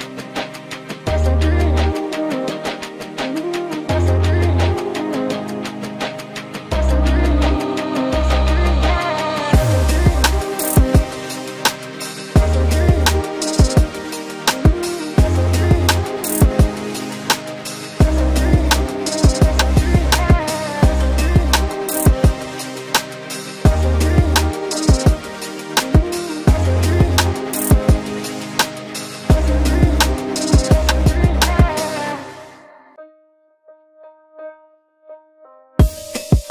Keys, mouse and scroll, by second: 3.6 ctrl+g, 15.7 ctrl+d, 34.4 click, 34.6 ctrl+x.